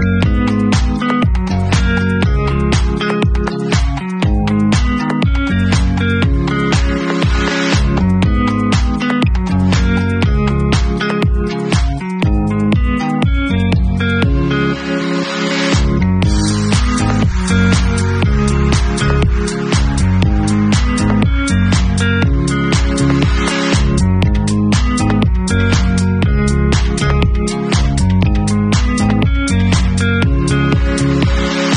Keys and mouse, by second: 0.4 w, 2.4 e, 3.5 w, 4.8-7.3 middle drag, 6.2 w, 7.3-9.4 alt+drag, 9.4-11.6 middle drag, 10.1 shift+z, 11.3 r, 11.6-24.2 drag, 12.7 w, 15.3 r, 16.5 w, 19.5 e, 22.6 w, 24.2 middle drag, 24.4-27.9 drag, 27.9-31.7 middle drag.